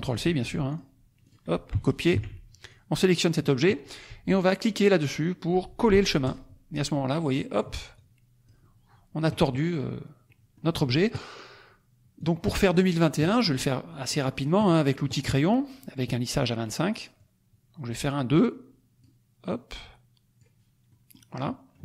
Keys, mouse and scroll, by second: 0.2 click, 0.7 click, 1.2 click, 2.1 ctrl+c, 2.5 ctrl+click, 6.2 click, 7.3 middle click, 7.9 click, 10.2 middle click, 10.2-10.7 scroll down 1, 12.1 click, 12.5 middle click, 17.1 click, 19.5 click, 20.8 middle click, 21.4 middle click.